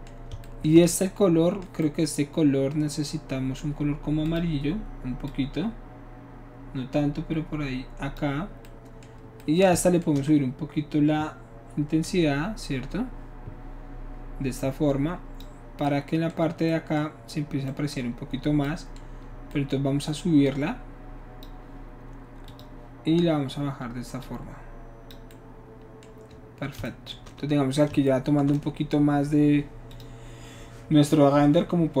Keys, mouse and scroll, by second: 4.3 click, 5.3-8.2 drag, 12.0-15.4 shift+drag, 15.8-17.1 middle drag, 17.7-20.4 middle drag, 20.4-21.4 drag, 22.5 click, 24.2 click, 25.3-26.8 middle drag, 28.5-29.1 shift+middle drag, 29.9 shift+click.